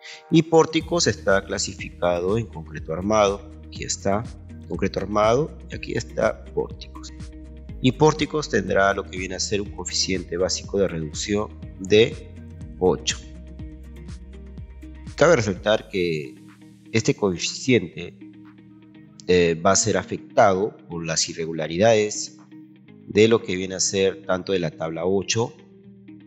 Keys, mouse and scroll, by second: 0.9 ctrl+a, 23.4 Escape, 25.3-25.8 scroll down 4.